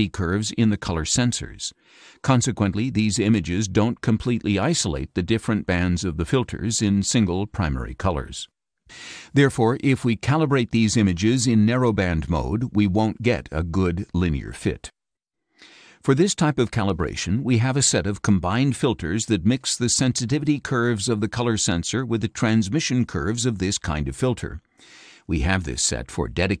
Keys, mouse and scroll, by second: 16.1 click, 20.0 shift+click, 24.3-26.6 drag.